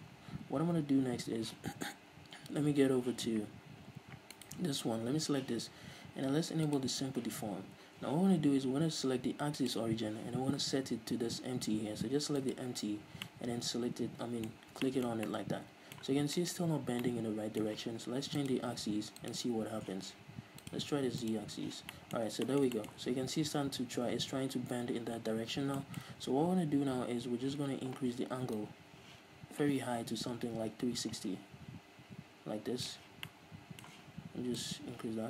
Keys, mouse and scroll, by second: 0.1-1.7 scroll down 2, 1.7-3.4 scroll down 1, 3.4-3.8 scroll down 1, 3.8-4.6 scroll up 1, 4.6-7.0 right drag, 7.0-13.3 drag, 13.3 scroll down 1, 13.5-18.6 middle drag, 14.7-15.6 scroll up 2, 18.6-22.2 drag, 22.2-28.8 middle drag, 22.5 scroll down 2, 28.8-33.5 drag, 33.5-34.8 middle drag, 34.8-35.2 drag.